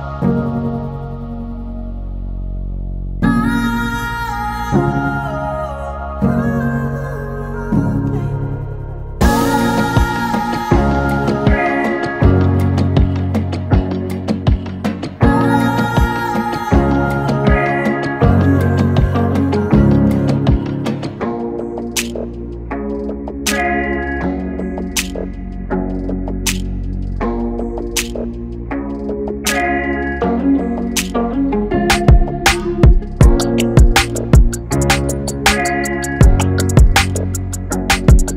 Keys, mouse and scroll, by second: 5.3 KP_1, 5.8 shift+z, 7.9 click, 8.5 shift+click, 9.5 click, 12.3 middle click, 14.5 KP_1, 14.9 scroll up 1, 15.2 ctrl+z, 15.8 click, 18.0 shift+click, 18.7 click, 20.5 middle click, 21.2 shift+z, 21.5 scroll down 1, 21.6 middle click, 22.5 ctrl+z, 23.0 ctrl+z, 23.1 middle click, 24.6 ctrl+r, 26.6 middle click, 27.3 ctrl+r, 29.1 middle click, 29.7 scroll down 2, 29.9 middle click, 30.3 ctrl+r, 32.1 middle click, 32.7 ctrl+r, 34.7 middle click, 35.3 ctrl+r, 37.2 KP_1, 37.5 scroll up 3, 37.8 shift+z.